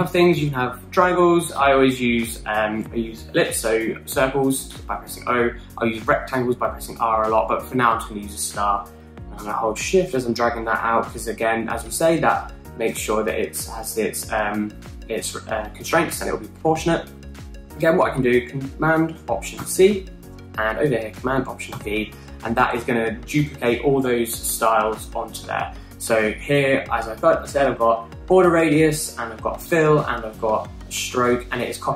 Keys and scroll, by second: 20.5 alt+super+c, 22.7 alt+super+v.